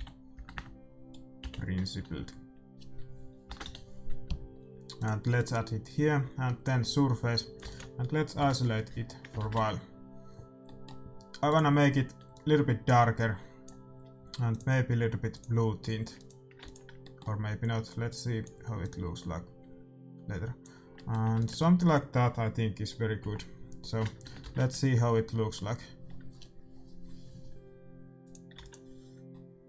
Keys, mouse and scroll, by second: 0.5 Insert, 5.8-7.4 drag, 7.1 middle click, 7.6 ctrl+s, 7.7-9.0 middle drag, 8.3 KP_Divide, 9.5 shift+z, 11.4-13.4 drag, 11.8 middle click, 14.5-16.3 drag, 16.6 ctrl+s, 17.0-18.8 middle drag, 18.0-20.6 drag, 20.9-23.3 middle drag, 21.3 ctrl+s, 23.3 KP_Divide, 26.1 shift+z, 28.2-29.6 drag, 28.6 ctrl+s, 29.3-29.6 middle drag.